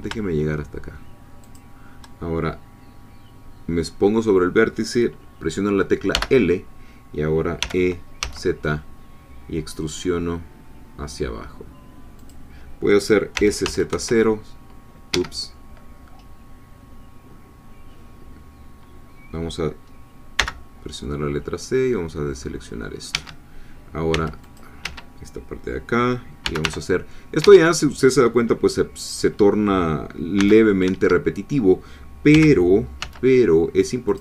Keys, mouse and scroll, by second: 1.4 shift+click, 6.1 l, 7.6 e, 8.2 z, 12.2 click, 13.4 s, 13.6 z, 13.9 0, 15.1 Escape, 20.4 c, 21.0-23.2 drag, 23.1 Escape, 24.1 c, 24.4 click, 24.8 Escape, 26.4 g, 26.6 y, 27.4 Escape, 30.4 c, 30.7 middle click, 30.8 Escape, 32.3 g, 33.0 z, 34.1-34.2 drag.